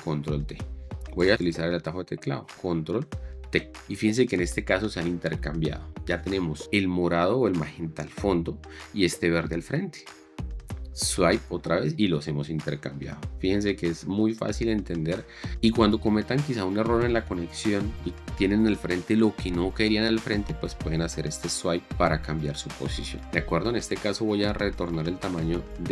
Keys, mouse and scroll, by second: 3.6 ctrl+t, 11.3 ctrl+t, 15.4 ctrl+t, 21.6 ctrl+t.